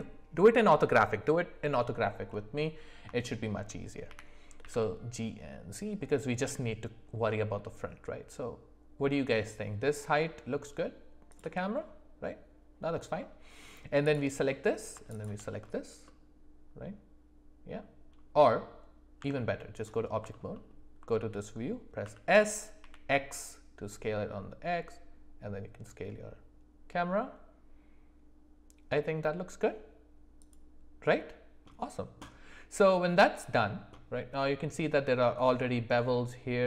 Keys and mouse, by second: 3.2 shift+middle click, 4.1 g, 13.2 middle click, 14.5 middle click, 15.1 shift+click, 16.0-17.8 middle drag, 19.2 Tab, 20.3 middle click, 20.5 middle click, 22.0 s.